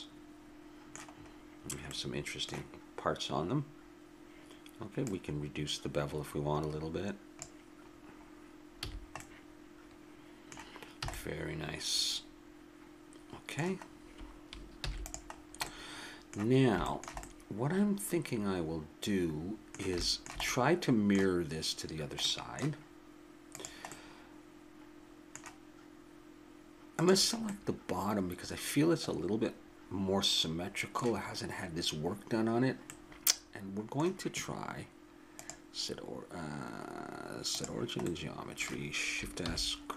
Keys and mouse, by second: 5.0-6.8 drag, 8.0-10.3 middle drag, 8.8 a, 11.0 a, 14.8 ctrl+s, 17.9-19.1 middle drag, 20.0-24.8 middle drag, 23.5-25.3 drag, 25.3-26.3 middle drag, 26.9-28.3 drag, 28.3 middle click, 28.7 click, 28.9 middle click, 32.8 middle click, 35.3-37.1 drag, 39.4 shift+s.